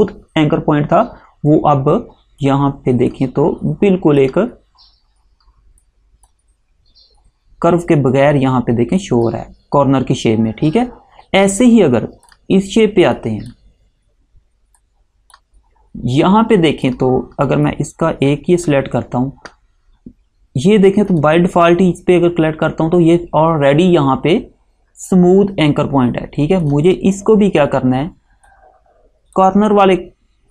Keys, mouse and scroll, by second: 2.5 click, 9.1 click, 21.2 click, 26.8 click.